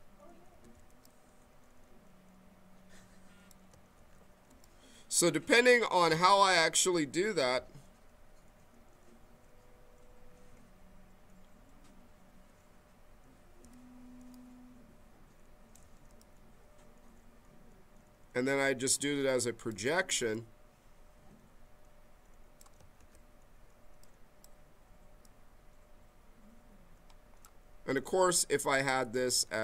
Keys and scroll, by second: 0.5 q, 3.9 ctrl+z, 13.6 q, 14.1 s, 22.9 ctrl+z, 28.0 ctrl+z.